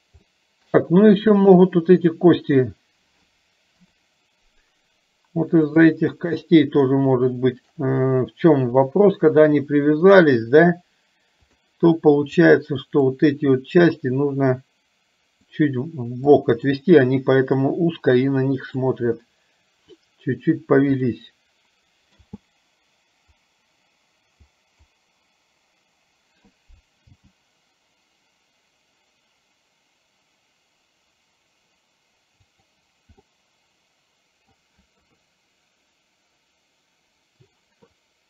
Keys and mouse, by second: 0.3 shift+middle click, 1.4 click, 3.8 KP_7, 5.7 click, 7.3 shift+middle click, 9.4-11.7 drag, 12.4 click, 14.1-15.6 drag, 16.4 click, 17.7-18.9 drag, 21.1 click, 22.3 space, 24.7 click, 33.6-34.8 middle drag, 35.2 KP_3.